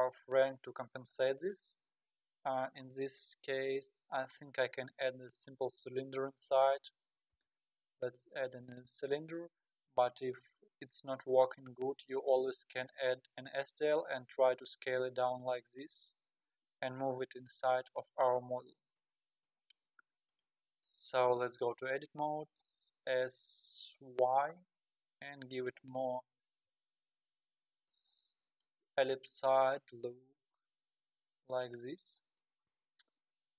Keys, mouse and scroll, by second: 2.0 KP_1, 2.6-3.0 scroll up 4, 3.4 KP_7, 7.3 shift+a, 12.3-13.8 scroll up 13, 13.8 s, 15.6-16.9 scroll down 13, 18.9 g, 21.4 Tab, 22.4 s, 23.8 s, 27.2 s, 30.3 g, 32.6 KP_1, 33.4-33.5 scroll up 5.